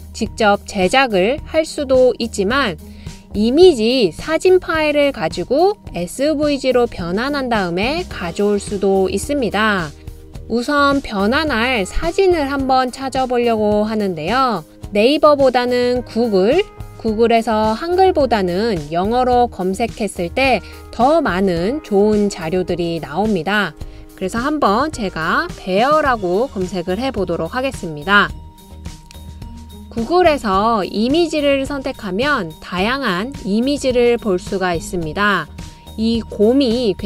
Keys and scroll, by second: 25.6-27.3 typing, 27.8 Return, 28.7 typing, 32.9 typing.